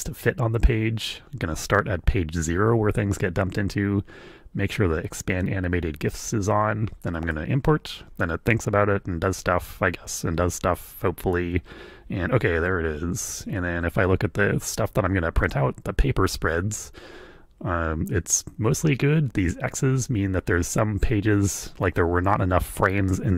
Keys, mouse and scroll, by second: 7.1 click.